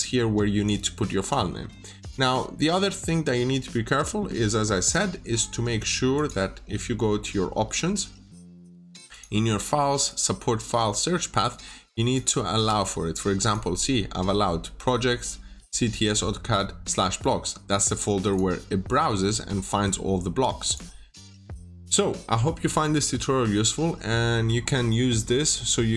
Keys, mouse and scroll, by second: 2.9-3.2 scroll down 1, 4.7 click, 21.2 middle click.